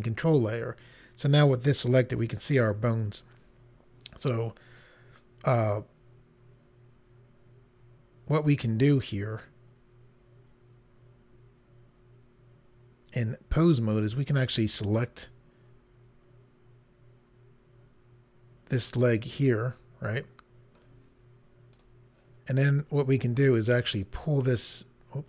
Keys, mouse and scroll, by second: 9.3 scroll up 1, 13.9 click, 21.7 click, 24.0 click.